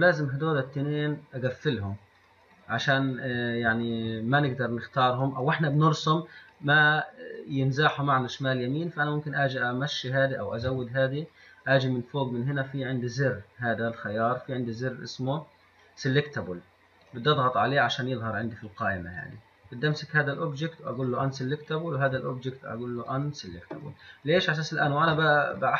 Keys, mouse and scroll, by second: 1.7 click, 2.4 click, 2.8 drag, 6.7 click, 7.2 click, 9.0-14.6 drag, 19.4 click, 20.1 click, 21.1 click, 21.9 click, 23.2 click, 24.3 click, 24.7-25.3 drag.